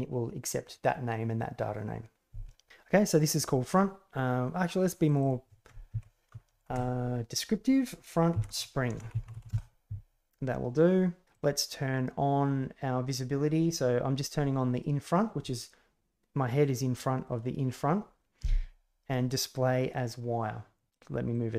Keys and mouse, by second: 5.0 click, 6.4-10.1 shift+drag, 11.3 click, 17.2 click, 19.2-20.7 drag, 21.3-21.5 drag.